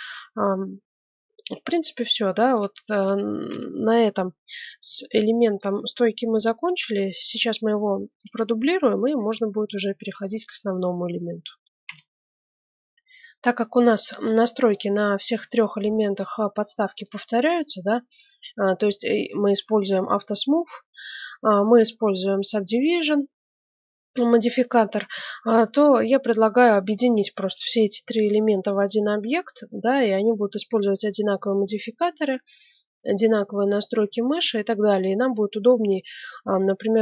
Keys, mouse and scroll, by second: 0.6-3.4 middle drag, 3.4 KP_1, 3.4 KP_2, 3.9 KP_1, 4.3-5.3 middle drag, 7.8 middle click, 9.4-11.1 middle drag, 11.8 F9, 14.2 middle click, 15.0-16.4 middle drag, 17.8-20.3 middle drag, 23.3-25.3 middle drag, 25.9-28.9 middle drag, 29.1-30.7 middle drag, 33.6-35.5 middle drag.